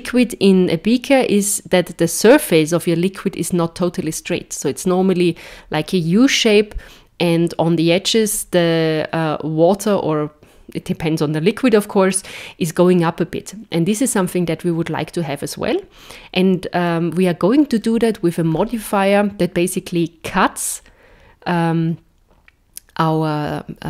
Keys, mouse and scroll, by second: 17.7 middle click, 18.5 scroll down 3.